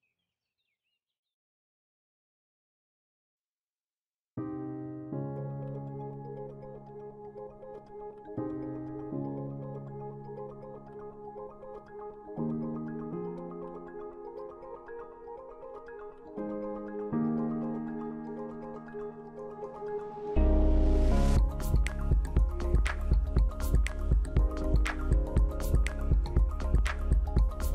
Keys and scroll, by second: 6.6 F9, 8.6 ctrl+0, 16.7 ctrl+z, 24.5 ctrl+z, 25.6 ctrl+2.